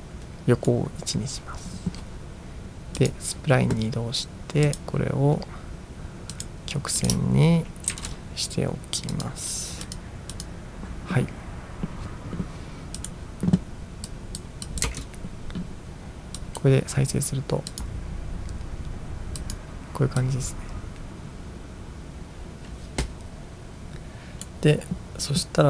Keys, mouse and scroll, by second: 3.0 click, 4.7 click, 6.4 click, 7.1 click, 8.2 ctrl+a, 9.2 click, 9.9 click, 10.5 click, 13.0 click, 14.2 click, 14.8 click, 15.0 space, 16.6 click, 17.7 click, 19.5 click, 20.4-24.5 drag.